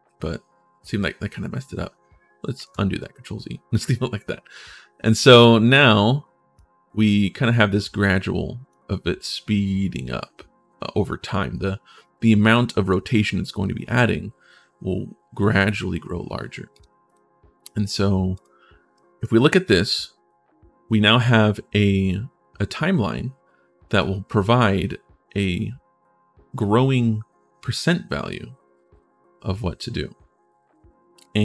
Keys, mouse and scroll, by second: 2.4 ctrl+z, 5.5 click, 6.3-8.4 drag, 16.5 click, 16.8 click, 18.1 click, 18.7 right click, 23.7-25.0 drag, 28.8-31.4 drag.